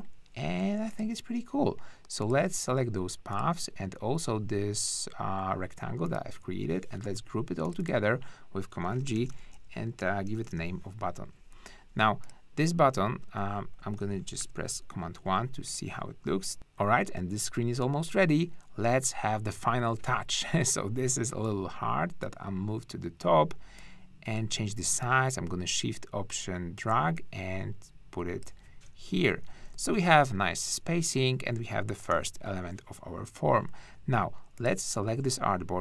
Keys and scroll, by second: 7.0 super+g, 8.9-10.4 typing, 10.5 Return, 14.4 super+i, 29.1 Down, 29.3 Right, 32.1 super+-.